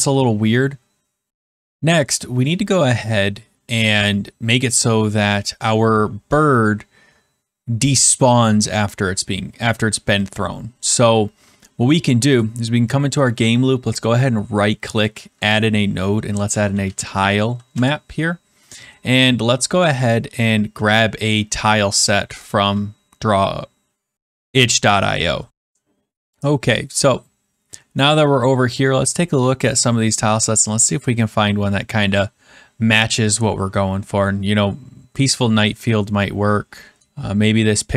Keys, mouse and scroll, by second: 12.4 click, 13.2 right click, 14.0 click, 16.4-17.8 typing, 19.1-19.7 scroll, 19.7-20.1 scroll, 20.7 scroll, 21.8 scroll, 25.7-26.1 scroll, 28.8 scroll down 2, 29.2-29.6 scroll, 29.8 scroll down 1, 30.0 scroll, 30.2 scroll down 2, 30.6 scroll, 30.6 scroll down 3, 30.9 scroll, 31.2 scroll up 11, 31.4-31.9 scroll, 35.7 scroll.